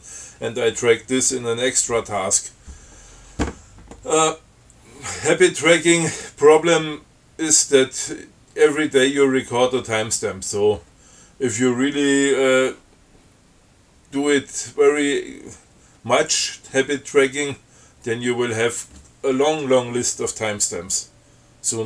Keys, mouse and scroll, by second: 5.8-6.1 scroll up 2, 6.3 scroll down 2, 6.9 scroll down 2, 8.1 scroll up 2, 9.9 scroll down 2, 10.4 scroll up 2, 18.3-18.7 scroll down 2, 18.7-19.2 scroll up 4.